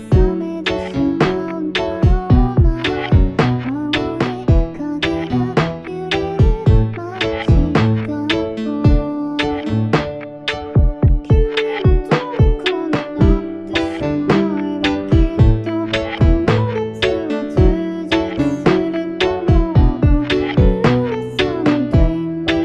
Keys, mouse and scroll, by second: 1.3 0, 15.9 F9.